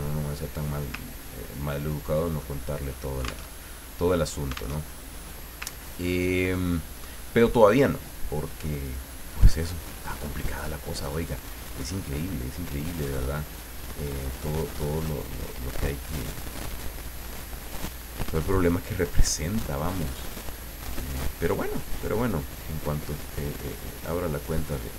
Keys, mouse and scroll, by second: 1.1-1.6 ctrl+scroll down 2, 1.8-2.2 ctrl+scroll down 2, 2.4-3.5 ctrl+middle drag, 3.6 ctrl+alt+Tab, 4.8 alt+Tab, 5.7 ctrl+scroll up 2, 6.6 ctrl+middle click, 8.8 click, 13.0 click, 14.9 click, 17.2 click, 19.0 click, 20.3 click, 22.1 click, 23.4-24.9 drag.